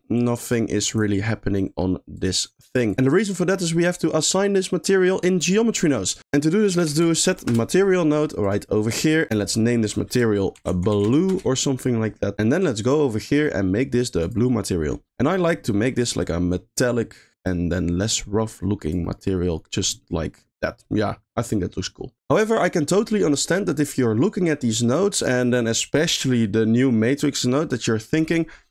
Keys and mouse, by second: 2.2 click, 6.0 middle click, 6.2 shift+a, 9.8-11.3 drag, 12.8-14.4 drag, 15.1 middle click, 16.3 click, 17.7-18.9 drag, 19.2 middle click, 20.0 middle click, 20.8 middle click, 23.3 middle click.